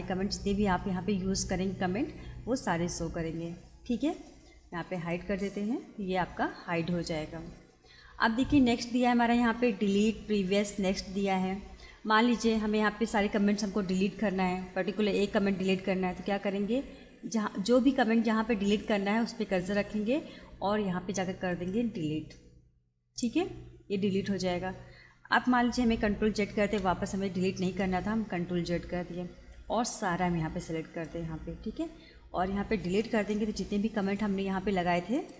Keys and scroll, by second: 26.4 ctrl+z.